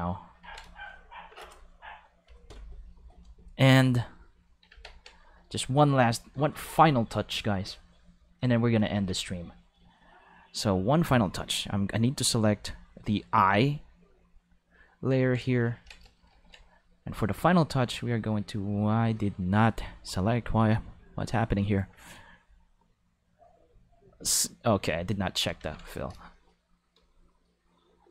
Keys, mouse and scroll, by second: 0.4 ctrl+5, 4.7 ctrl+Tab, 5.3 click, 7.2 click, 8.2 click, 8.9 ctrl+5, 11.0 drag, 12.5 click, 13.4 click, 13.4 5, 14.2 click, 15.3 ctrl+middle click, 16.1 shift+middle click, 17.4-18.9 drag, 22.4 click, 24.1 click, 25.6 ctrl+5, 26.2 shift+middle click, 27.0 shift+middle click, 28.0-28.1 drag.